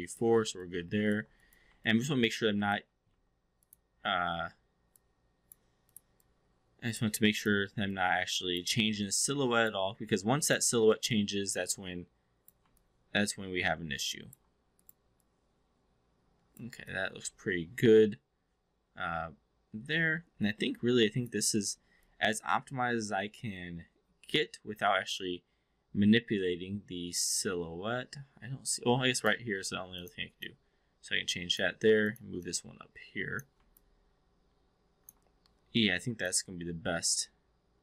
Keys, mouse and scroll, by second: 0.0 shift+click, 0.6-1.2 alt+drag, 1.8-2.7 alt+drag, 3.0 1, 3.6 click, 4.9-5.5 drag, 5.8 click, 6.2-7.0 drag, 7.2 click, 7.8 click, 8.9-9.8 alt+drag, 11.2-12.5 drag, 12.8-14.4 alt+drag, 15.2-16.6 drag, 16.9-21.3 alt+drag, 21.6 alt+middle click, 22.0-29.4 alt+drag, 30.3-31.4 drag, 32.0 click, 32.4-33.4 drag, 33.8-35.2 alt+drag, 36.2-37.8 alt+drag.